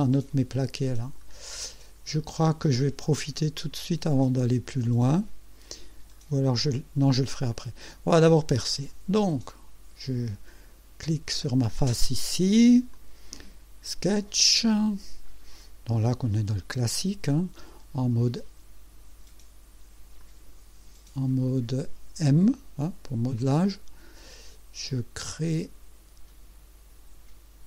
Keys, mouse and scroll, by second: 1.7 scroll up 1, 2.1-2.4 scroll down 1, 2.7-3.5 drag, 3.7 scroll up 1, 4.2 right click, 6.1 scroll down 1, 7.5 click, 8.6 click, 12.9 click, 14.1-15.6 right drag, 20.2 click, 23.4 click, 25.3 click.